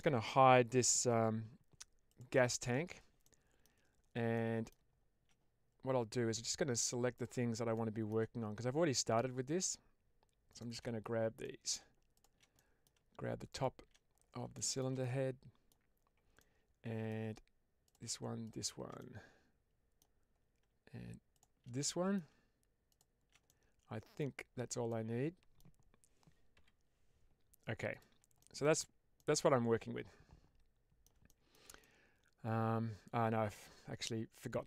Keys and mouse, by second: 2.0 click, 2.6 h, 3.1-3.5 middle drag, 4.2-4.6 middle drag, 7.0 click, 7.7-8.1 shift+middle drag, 9.0 shift+click, 10.4 shift+click, 11.3 middle click, 12.0 shift+click, 12.4 middle click, 13.4 shift+click, 14.4-14.7 shift+middle drag, 14.9-15.6 middle drag, 16.3-16.9 middle drag, 17.7 shift+click, 18.9-19.9 middle drag, 21.2 shift+click, 21.7 middle click, 23.3 middle click, 24.8-25.5 middle drag, 27.8 click, 28.3 shift+middle drag, 29.0-30.9 middle drag, 31.2 shift+middle drag, 31.7-34.5 middle drag.